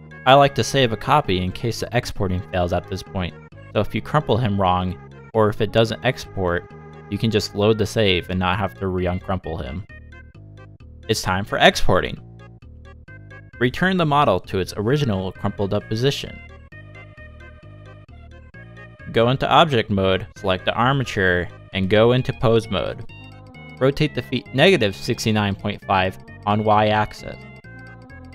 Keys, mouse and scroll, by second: 0.6 shift+click, 1.2 click, 2.0 click, 2.4 l, 2.6 x, 3.0 scroll down 6, 3.2 shift+middle click, 3.6 shift+middle click, 3.9-4.3 scroll up 3, 4.3 shift+middle click, 4.8 Tab, 5.5 scroll down 1, 6.0 shift+middle click, 6.2 middle click, 18.5 scroll down 1, 21.1 shift+middle click, 21.8 middle click, 22.8 scroll up 1, 23.1 shift+middle click, 23.9 middle click, 24.5 shift+middle click, 24.8 click, 25.1 click, 25.6 ctrl+Tab, 26.2 middle click, 26.4 r.